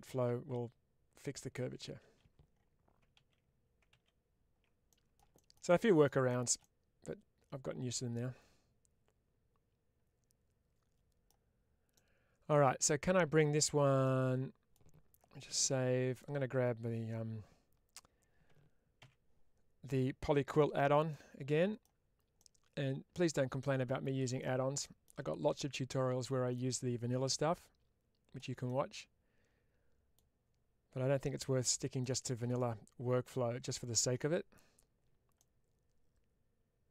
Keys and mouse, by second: 2.1 ctrl+z, 4.8 middle click, 5.6 middle click, 6.7-11.1 middle drag, 11.9 middle click, 13.7 1, 14.0 middle click, 21.0-21.7 middle drag, 22.2-24.3 middle drag, 24.7 shift+middle click, 25.6-26.4 middle drag, 27.2-28.3 drag, 28.5-30.0 middle drag, 31.3-31.6 middle drag, 32.1 shift+middle click, 32.4-33.8 middle drag, 35.2-36.8 middle drag.